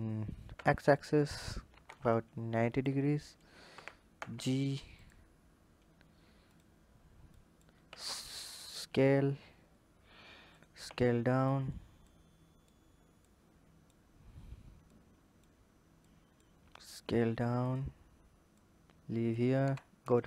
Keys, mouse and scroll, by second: 3.5 g, 6.3 click, 7.7 s, 8.9-9.7 scroll up 2, 10.3 click, 10.7 s, 11.9 click, 13.0 click, 13.9 scroll up 1, 15.8 click, 18.3 click.